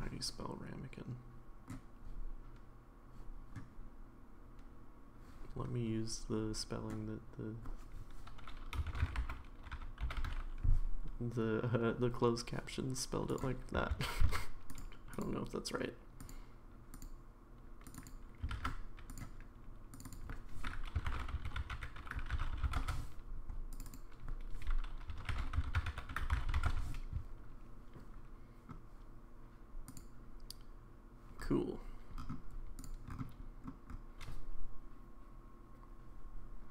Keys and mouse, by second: 15.2 click, 17.0 click, 17.8 click, 18.6 ctrl+click, 19.9 click, 20.0-23.3 drag, 23.8-27.2 drag, 29.9 click, 32.8 click.